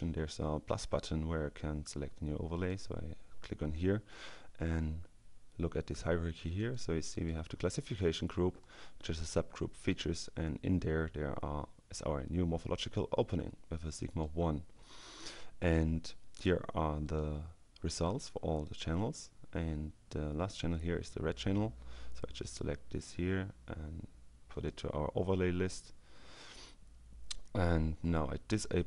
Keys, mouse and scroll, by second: 1.7-3.1 drag, 6.3 click, 7.9 click, 9.8 click, 14.1 click, 16.4 click, 17.0 click, 17.8 click, 22.0 click, 24.5 click, 28.6 click.